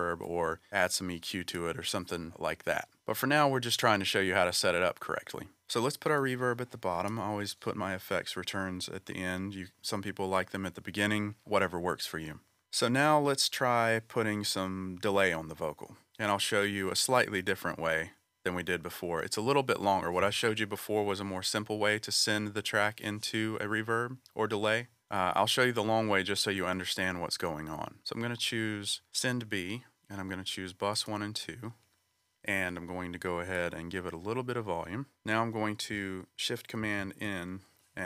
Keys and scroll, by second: 36.8 shift+super+n.